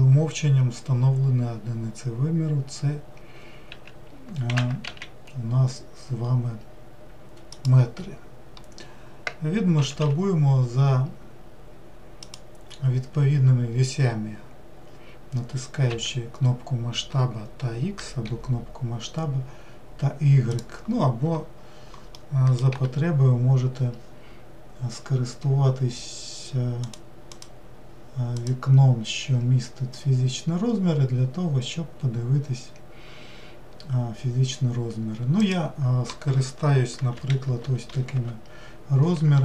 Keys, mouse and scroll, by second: 21.6-22.0 scroll down 2, 35.4-38.5 drag.